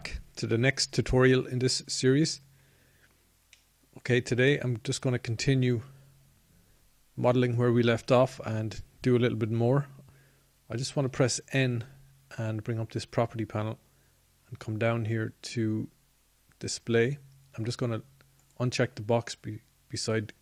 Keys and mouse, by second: 5.1 click, 5.3-9.6 drag, 17.0 n.